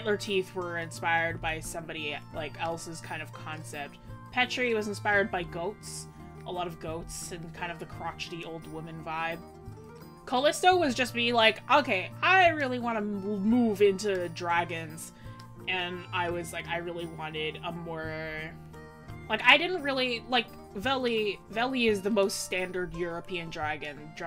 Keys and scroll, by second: 13.7 scroll up 1, 14.7-15.3 scroll up 1, 18.8-19.3 scroll down 1.